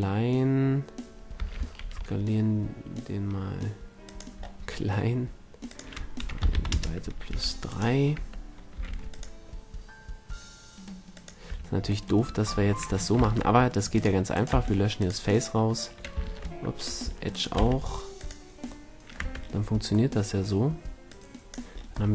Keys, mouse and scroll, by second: 1.3 s, 4.1-7.3 drag, 7.3 a, 7.7-9.5 right drag, 8.1 Tab, 8.9 ctrl+r, 11.3-12.9 drag, 11.5 a, 13.2 ctrl+Tab, 14.3 click, 14.5 x, 16.2 ctrl+Tab, 17.5 x, 19.2 Tab, 21.1 drag.